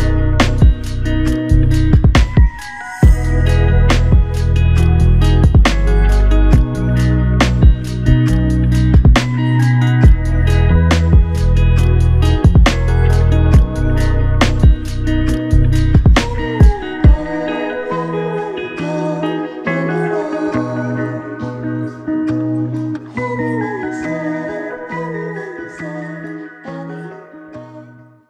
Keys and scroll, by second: 3.4 ctrl+z.